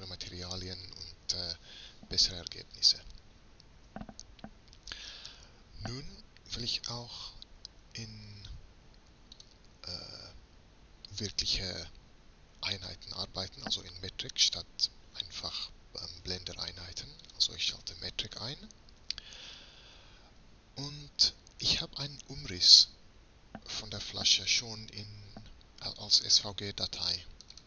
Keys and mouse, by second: 9.4-15.2 drag, 17.3-19.1 drag, 19.1-23.4 middle drag.